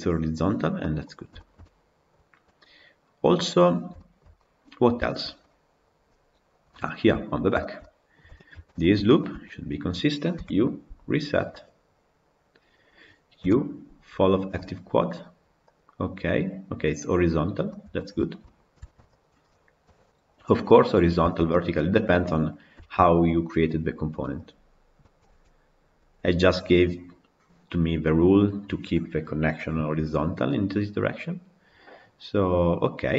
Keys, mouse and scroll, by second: 7.1 scroll up 2, 7.4-9.0 shift+middle drag, 9.0 alt+click, 11.7 u, 15.8 u, 17.0-17.5 scroll down 3, 17.5-18.8 middle drag, 18.8 Tab, 18.9 click, 19.7 KP_Decimal, 20.5-23.2 middle drag, 23.2-28.2 scroll up 1, 30.3-33.1 middle drag.